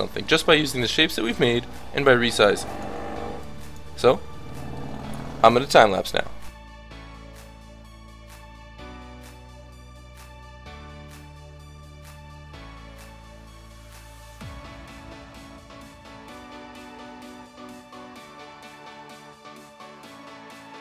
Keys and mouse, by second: 1.9-3.2 middle drag, 3.2-4.5 drag, 4.5 middle click, 6.5-20.8 typing, 6.6 click, 6.7 middle click, 6.8 ctrl+z, 6.9 ctrl+z, 7.2 click, 7.2 right click, 7.4 click, 7.7 click, 7.7 right click, 7.9 click, 8.3 click, 8.3 right click, 8.4 Tab, 8.4 Tab, 8.5 click, 8.7 click, 11.4 Tab, 11.6 Tab, 11.6 click, 11.8 click, 11.9 Tab, 11.9 Tab, 12.1 Tab, 12.3 click, 12.7 click, 13.9 Tab, 14.0 Tab, 14.2 Tab, 14.2 click, 14.3 click, 14.3 Tab, 14.4 click, 14.9 click, 14.9 right click, 16.2 Tab, 16.5 click, 16.7 Tab, 16.8 Tab, 16.9 click, 16.9 right click, 17.1 Tab, 17.5 click, 18.1 Tab, 20.5 Delete.